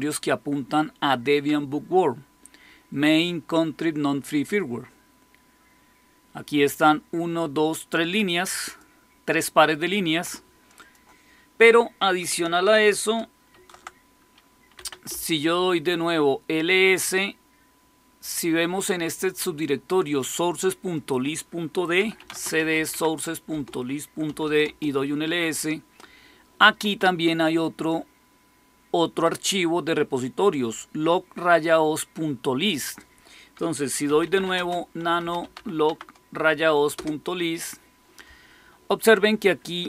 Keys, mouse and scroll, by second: 8.6 click, 10.7 click, 13.4 ctrl+x, 14.5-15.3 typing, 18.2-19.8 drag, 20.8 click, 21.7-24.7 typing, 23.4 Return, 27.8-29.2 drag, 32.6 click, 33.7-35.9 typing, 36.8 Return.